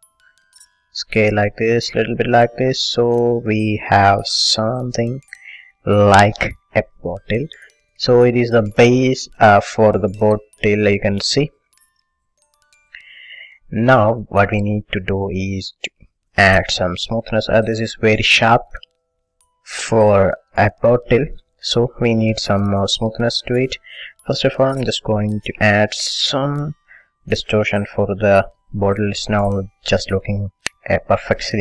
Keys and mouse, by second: 1.1 s, 4.9-10.5 middle drag, 12.3 middle click, 12.4 KP_1, 12.7 middle click, 16.4 middle click, 18.2-19.4 middle drag, 20.0-21.5 middle drag, 21.6 middle click, 24.0 middle click, 24.8 a, 26.3 middle click.